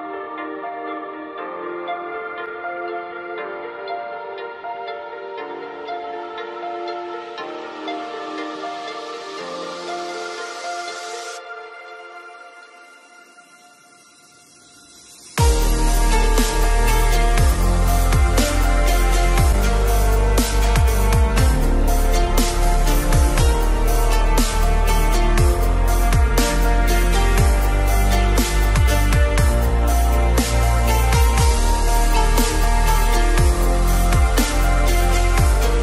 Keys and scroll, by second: 25.4 ctrl+g.